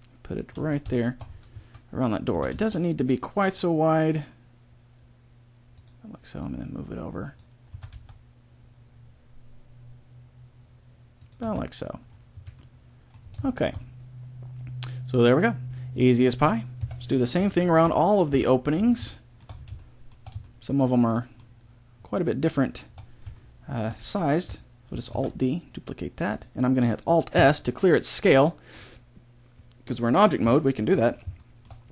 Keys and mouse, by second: 0.6 z, 1.3-2.3 middle drag, 1.5 z, 2.3 s, 6.3-8.1 drag, 7.7 s, 11.4 z, 12.3 a, 12.5 middle click, 16.7 KP_7, 17.4 z, 17.8 KP_5, 18.3 KP_5, 22.5 middle click, 25.1 alt+d, 27.4 alt+s, 30.7-31.9 middle drag.